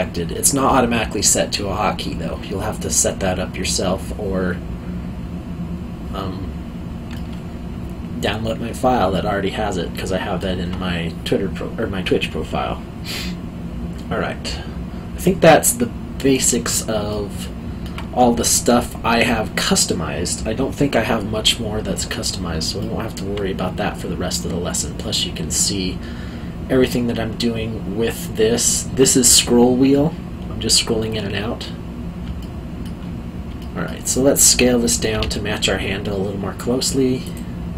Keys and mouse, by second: 7.1 middle click, 17.1 alt+middle click, 22.8 alt+middle click, 32.4 alt+middle click, 33.6 alt+middle click, 35.1 s, 37.2 click.